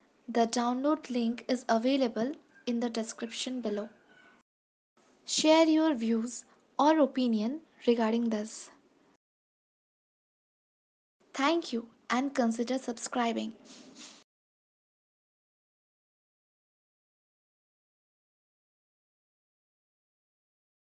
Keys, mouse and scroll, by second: 4.3 space, 5.2-7.4 scroll down 13, 8.3 click, 9.2 ctrl+s, 9.2 click, 9.2 space, 9.9 space.